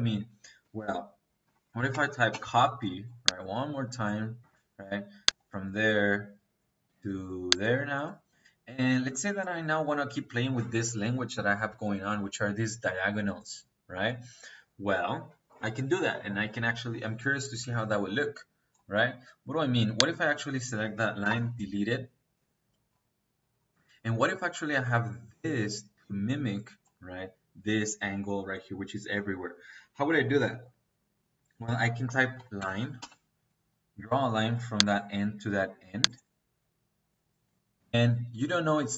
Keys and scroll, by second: 1.4-2.2 typing, 4.3 -, 21.1 Delete, 30.1 Escape, 31.5-32.9 typing.